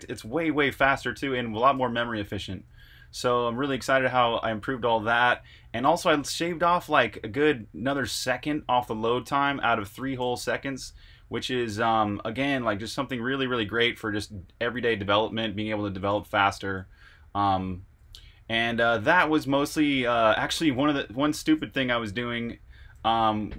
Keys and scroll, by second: 0.0-3.7 typing, 5.6-6.3 typing, 9.8-21.3 typing, 22.7-23.4 typing.